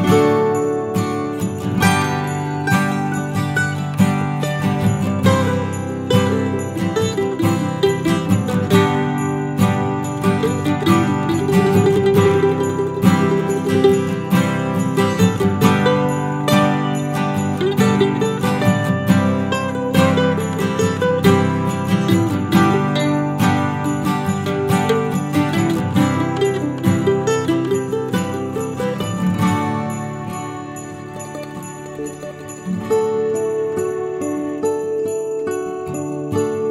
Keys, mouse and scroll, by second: 0.3 right click, 1.1 scroll down 1, 1.3 middle click, 2.0 middle click, 2.3 shift+middle click, 2.5 shift+middle click, 2.5-2.8 scroll up 4, 2.8 middle click, 3.1 scroll down 3, 3.3 alt+middle click, 3.7 middle click, 4.1 shift+middle click, 4.3-4.7 scroll up 2, 4.7 click, 5.0 right click, 6.7 click, 6.9 right click, 7.7 ctrl+z, 7.9 scroll down 2, 8.1 middle click, 9.1 scroll down 1, 9.2 middle click, 10.5 shift+middle click, 10.7-11.5 scroll up 1, 11.5 click, 11.9 alt+click, 12.6 click, 13.2 click, 13.9 alt+click, 14.4 middle click, 14.9 alt+shift+middle click, 15.3 shift+middle click, 16.9 shift+click, 17.4 alt+shift+click, 17.8 alt+shift+click, 18.8 alt+shift+click, 19.0 middle click, 19.4-19.9 scroll down 2, 19.7 middle click, 20.3 alt+shift+click, 20.7 alt+shift+click, 21.6 alt+shift+click, 21.7 middle click, 22.3 ctrl+z, 22.8 shift+click, 23.0 middle click, 25.1 shift+click, 25.6 shift+click, 26.0 alt+shift+click, 26.5 alt+shift+click, 27.1 alt+shift+click, 27.7 ctrl+z, 28.2 alt+shift+click, 28.8 scroll down 1, 29.0 middle click, 29.6 g, 30.5 middle click, 31.4 ctrl+b, 34.6 middle click, 35.3 Tab, 35.5 middle click, 36.5-36.7 scroll up 2.